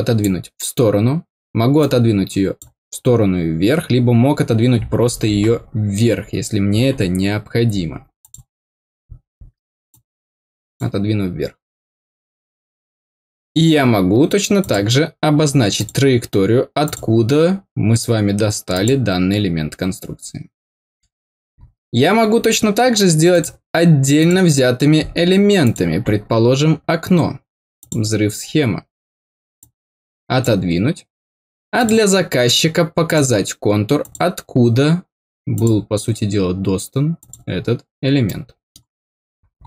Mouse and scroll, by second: 1.7 click, 8.1 click, 9.8 click, 14.5 click, 15.7 click, 16.8 click, 18.7 click, 23.2 click, 24.1 click, 25.6 click, 27.7 click, 29.5 click, 31.7 click, 33.0 click, 33.9 click, 35.5 click, 37.1 click, 38.2 middle click, 39.2-39.6 scroll down 4, 39.5 middle click.